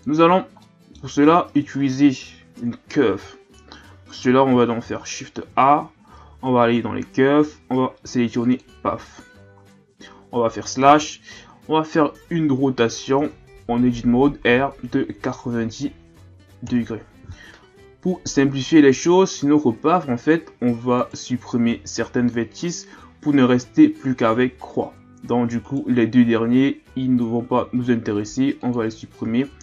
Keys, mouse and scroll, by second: 0.0-0.6 scroll down 3, 0.6-1.7 middle drag, 1.7-2.6 ctrl+scroll up 1, 2.6 KP_1, 3.5-4.1 ctrl+scroll down 2, 4.1-4.7 scroll up 2, 4.8 shift+a, 10.3 KP_Divide, 13.2 Tab, 14.5 r, 17.8 ctrl+scroll down 1, 21.0 right click, 25.6 shift+right click, 27.5 x, 29.3-29.6 shift+scroll up 1.